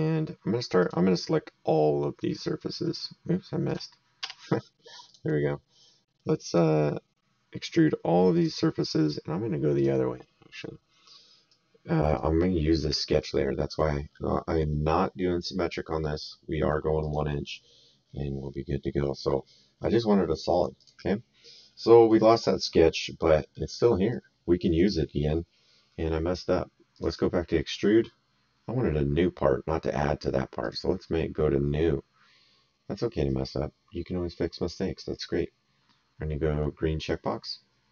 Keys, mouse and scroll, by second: 0.8 click, 3.6 click, 4.2 s, 5.0 click, 6.4 click, 7.6 click, 9.7 click, 11.5 right click, 13.2 right click, 17.0 click, 20.8 click, 21.8 middle click, 23.3 middle click, 24.1 right click, 26.9 click, 30.6 click, 36.9 click.